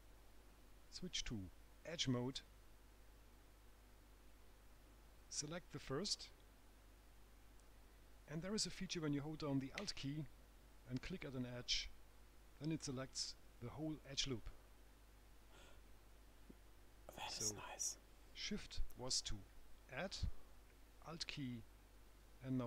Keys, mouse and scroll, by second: 2.1 click, 3.5 right click, 4.4-5.1 scroll up 1, 5.6 click, 11.8 alt+click, 16.5 right click, 21.7 alt+shift+Left.